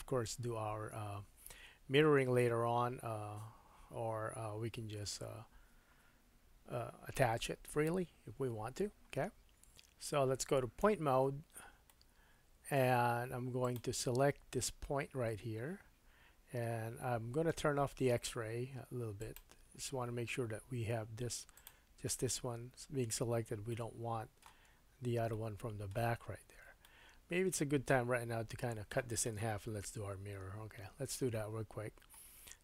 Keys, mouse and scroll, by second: 9.2 Tab, 9.9 Tab, 10.8 1, 11.3-11.7 scroll up 1, 11.9 shift+middle click, 13.7-19.2 middle drag, 19.2-21.7 drag, 21.7-23.7 middle drag, 24.1-32.6 middle drag, 24.7-25.3 scroll down 3, 30.1 KP_1, 31.1-32.4 scroll down 2, 32.4-32.6 scroll down 2.